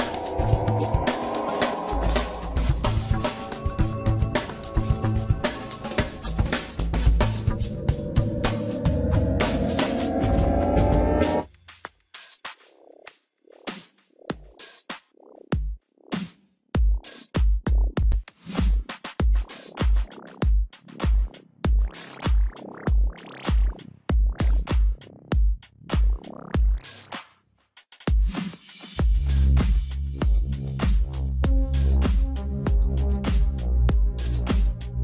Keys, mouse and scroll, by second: 0.3 x, 2.0-3.1 middle drag, 3.1 click, 4.0 alt+shift+click, 4.5 KP_1, 9.1 s, 11.3-12.5 middle drag, 12.5 e, 15.7 KP_1, 16.5 g, 18.7 Tab, 19.0 scroll down 2, 19.2-20.9 middle drag, 20.9-21.4 scroll down 1, 21.4-23.2 middle drag, 23.2 KP_1, 24.1-24.6 scroll down 1, 24.6-25.4 shift+middle drag, 25.4-26.4 scroll up 1, 26.4-26.7 scroll up 1, 26.7 click, 27.5 click, 27.9 scroll down 2, 28.5-29.2 shift+middle drag, 29.2-30.4 scroll up 1, 33.9 shift+d, 34.7 r.